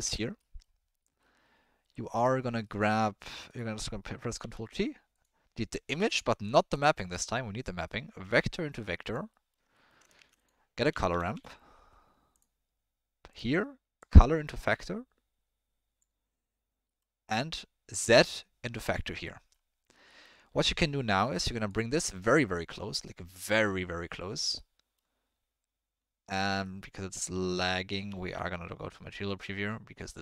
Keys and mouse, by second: 3.4 click, 4.4 ctrl+t, 5.1 click, 5.9 Delete, 6.5 click, 6.9 click, 8.2-9.1 drag, 9.4 middle click, 9.7 middle click, 10.1 shift+a, 14.0-16.0 drag, 17.0 middle drag, 17.9-19.0 drag, 19.3 middle click, 20.1 middle click, 22.1 click, 23.4 click, 24.7 middle click, 27.0 middle click, 28.1 z.